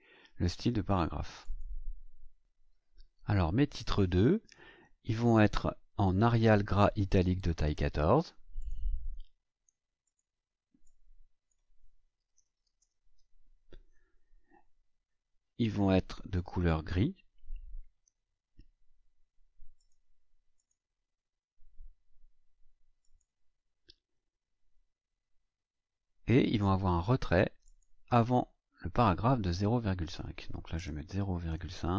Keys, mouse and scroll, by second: 1.4 click, 8.6 click, 10.0 click, 10.8-11.6 drag, 12.1-13.1 typing, 19.7 click, 20.5 click, 23.0 click, 27.6 click, 30.7 KP_0, 31.4 ,, 31.4 KP_5.